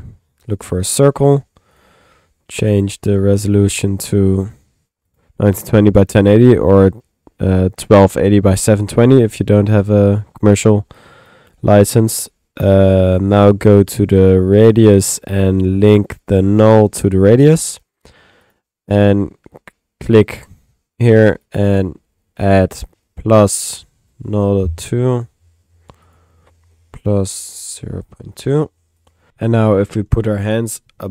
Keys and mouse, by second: 0.0-0.4 typing, 0.7 click, 1.0 middle click, 1.7 click, 3.7 click, 5.1 click, 9.2 middle click, 10.9 click, 11.6 click, 12.6 click, 14.7 click, 15.1 middle click, 15.8 click, 16.2-17.4 drag, 18.4 click.